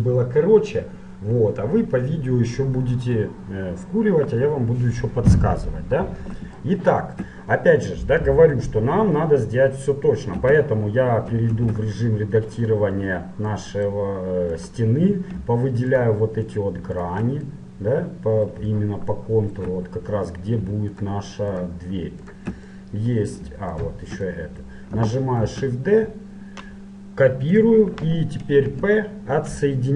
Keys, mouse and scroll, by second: 2.2-6.0 middle drag, 6.7-8.5 middle drag, 10.5 Tab, 11.7 ctrl+Tab, 13.7-15.4 middle drag, 14.7-18.9 right drag, 17.7 middle click, 18.9-21.1 middle drag, 21.1-22.9 right drag, 22.9-26.3 middle drag, 25.5 shift+d, 28.7 p.